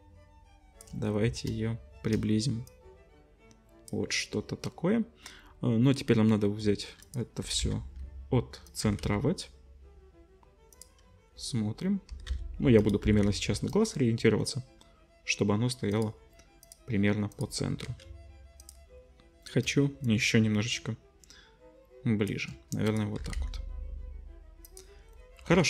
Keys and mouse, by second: 7.1-11.8 drag, 7.4 g, 8.8 g, 12.1 g, 13.0 g, 15.9 middle click, 16.6 middle click, 17.3 middle click, 17.9 ctrl+s, 18.6 middle click, 20.0-23.0 shift+middle drag, 23.2 g, 25.5 ctrl+s.